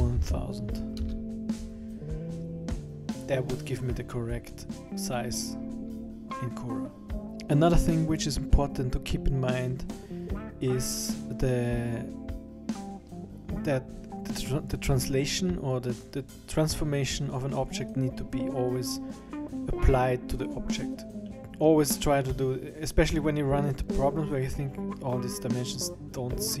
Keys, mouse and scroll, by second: 20.9 click.